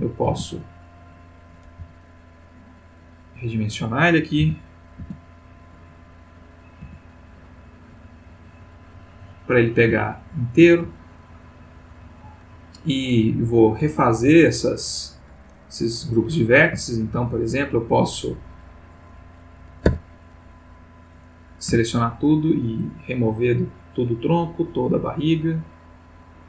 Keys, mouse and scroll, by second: 0.3 s, 1.4 click, 1.7 g, 3.0 click, 4.4 s, 5.0 z, 6.5 click, 6.8 s, 7.7 click, 7.9 g, 9.3 click, 10.0-10.7 ctrl+middle drag, 10.9-11.5 ctrl+shift+middle drag, 11.6-12.4 shift+middle drag, 14.6 click, 16.9-17.8 shift+middle drag, 19.9 Tab, 21.7 a, 23.0 click, 23.8 click, 24.5 click, 25.3 click.